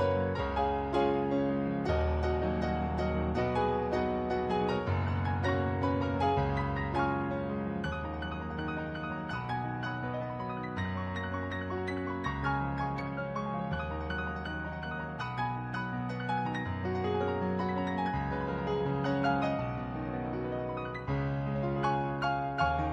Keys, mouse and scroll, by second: 0.3 ctrl+z, 0.6 ctrl+z, 2.3 ctrl+z, 2.5 ctrl+z, 5.2 ctrl+z, 7.0 ctrl+z, 9.4 ctrl+z, 14.5 ctrl+z, 14.9 ctrl+z, 15.7 ctrl+z, 16.5 ctrl+z, 16.9 ctrl+z, 17.7 ctrl+z, 19.6 ctrl+z.